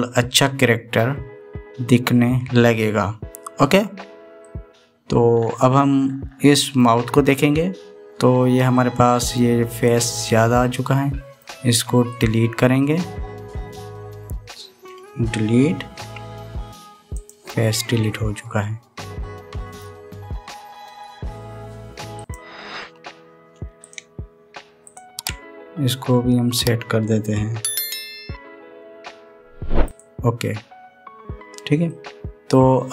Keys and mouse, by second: 5.2-7.6 middle drag, 9.5 middle click, 10.6 click, 11.2-12.2 middle drag, 13.0-16.7 drag, 16.7 Delete, 18.8-20.5 middle drag, 21.4-23.1 drag, 25.6 shift+click, 29.0 e, 30.7-32.1 drag, 30.7-32.1 middle drag, 30.7-32.1 right drag, 32.6-32.9 middle drag.